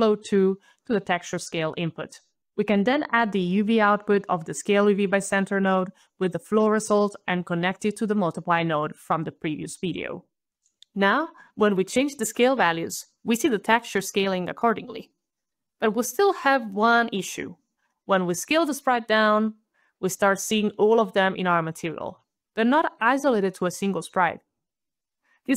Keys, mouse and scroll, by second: 0.5 alt+right click, 1.6 alt+click, 3.6 alt+click, 4.9 alt+click, 5.7 alt+click, 7.1 alt+click, 7.5 alt+middle click, 8.6 alt+click, 10.2 alt+scroll down 1, 11.0 alt+right click, 11.3 alt+middle click, 11.3 alt+middle click, 11.4 alt+middle click, 12.2 alt+right click, 12.4 alt+right click, 13.0 alt+KP_Decimal, 13.2 alt+KP_5, 13.4 alt+KP_Enter, 14.7 alt+click, 14.8 alt+click, 15.3 alt+KP_Decimal, 15.5 alt+KP_5, 15.6 alt+KP_Enter, 24.8 alt+click.